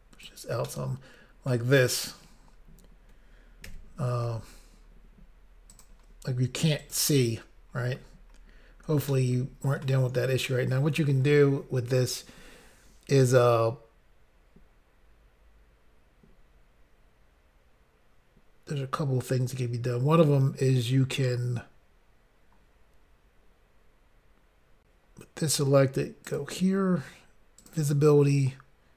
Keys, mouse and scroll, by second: 0.7 middle click, 1.8 scroll up 2, 4.3 n, 5.7 click, 5.9 click, 6.8 click, 7.8 scroll up 2, 8.4 scroll down 1, 9.2 shift+middle click, 26.3 click, 26.4 click, 27.6 click, 27.7 click.